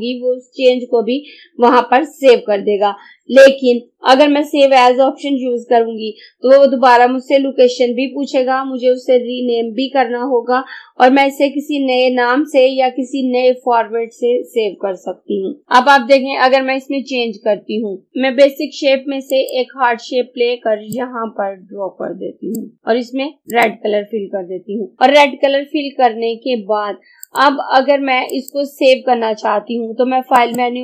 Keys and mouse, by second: 18.1 click, 27.3 click.